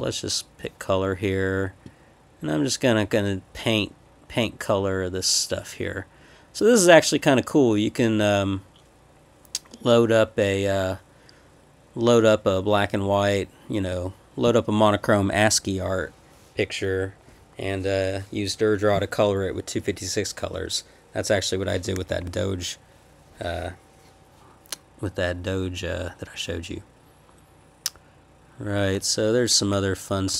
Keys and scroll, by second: 22.1 Escape, 22.2 p, 30.3 Escape.